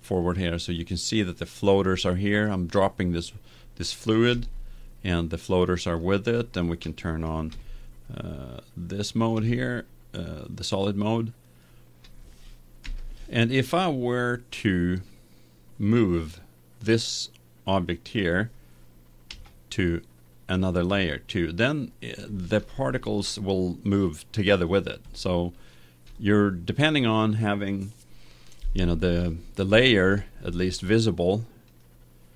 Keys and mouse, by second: 0.1-2.5 drag, 6.2 middle click, 7.5 z, 8.1 middle click, 12.1-14.0 middle drag, 12.8 KP_1, 15.8 middle click, 19.3 m, 23.0-24.9 middle drag, 25.0 middle click, 31.7-32.3 drag.